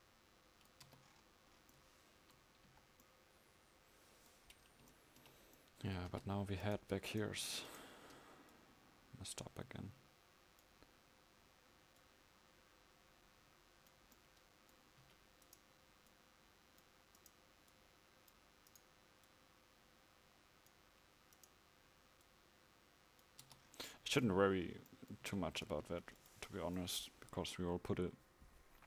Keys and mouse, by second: 0.9 Tab, 2.8 KP_5, 6.1 Tab, 9.6-14.3 drag, 14.0 right click, 15.1 a, 18.6-23.5 drag, 18.6-23.5 right drag, 23.5 Tab, 25.3 a, 25.9 ctrl+s.